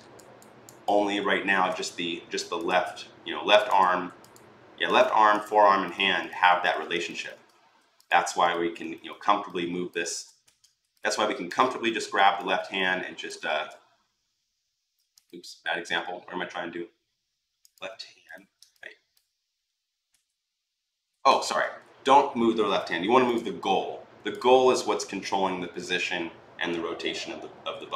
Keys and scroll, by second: 9.9 ctrl+z, 13.3 ctrl+z, 19.9 w.